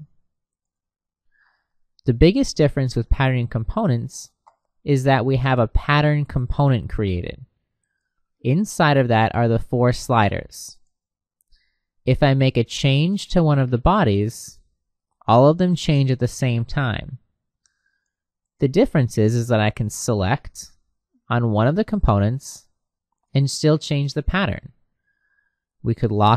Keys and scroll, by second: 17.2 Escape.